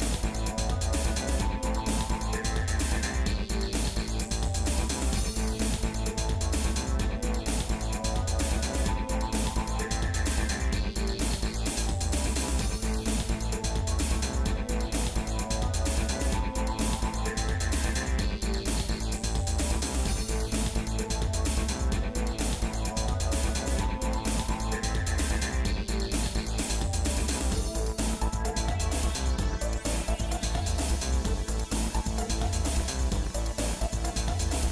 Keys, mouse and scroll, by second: 7.3 z, 9.0-11.0 shift+middle drag, 11.3-11.6 scroll down 1, 11.7 middle click, 12.5 scroll down 1, 13.2 middle click, 14.0 scroll up 1, 14.5 middle click, 15.3-16.9 shift+middle drag, 17.5 z, 23.1 click, 23.6-24.9 shift+middle drag, 25.7 scroll up 1, 26.3-29.2 shift+middle drag, 29.8-31.1 shift+middle drag, 32.4 g.